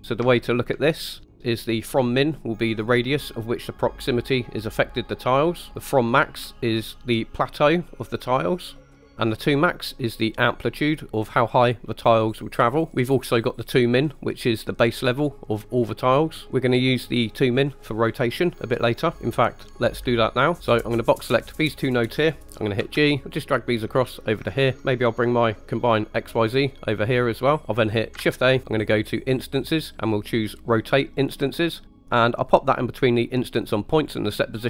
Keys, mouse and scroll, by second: 0.4 shift+middle click, 1.0 middle click, 1.3 middle click, 2.8-5.7 drag, 5.9-9.0 drag, 10.1-12.9 drag, 14.2-16.5 drag, 20.6 right click, 20.8-21.5 drag, 22.8 g, 24.5 click, 25.9-27.6 drag, 28.2 shift+a, 34.1 click.